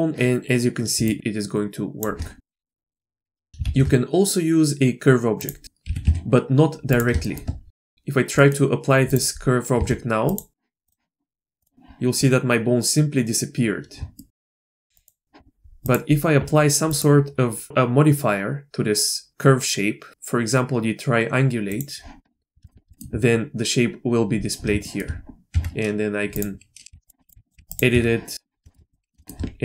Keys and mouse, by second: 1.1 shift+click, 2.4 middle click, 2.6 middle click, 2.9 middle click, 3.0 shift+a, 3.2 Tab, 3.4 shift+a, 3.5 ctrl+z, 3.6 shift+a, 5.6 click, 5.8 g, 7.2 shift+click, 7.7 shift+click, 8.3 click, 9.0 click, 9.7 Tab, 10.3 click, 10.9-12.7 drag, 14.1 shift+click, 14.4 Tab, 15.0 click, 17.0-21.8 drag, 22.6 shift+middle click, 22.9 shift+middle click, 24.8 shift+middle click, 25.5 Tab, 26.3-26.9 drag, 26.9 g, 27.3 g, 27.5 g, 27.9 Tab, 28.6 shift+click, 28.9 click, 29.2 shift+click.